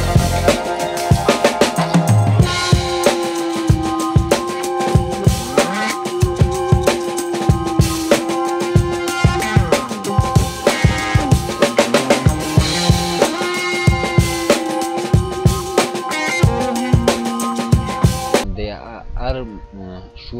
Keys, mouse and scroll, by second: 1.5-2.7 drag, 3.7-4.3 scroll down 1, 5.0-5.9 drag.